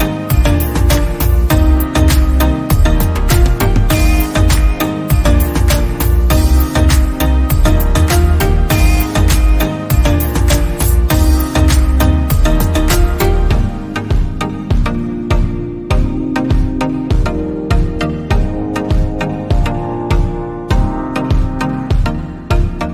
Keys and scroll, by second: 1.0 Right, 1.6 Right, 3.6 Left, 7.3 ctrl+g, 8.4 Left, 9.0 Left, 9.6 Right, 15.5 ctrl+g, 21.1 Down, 21.2 Down, 21.3 Down, 21.4 Down, 21.7 Down.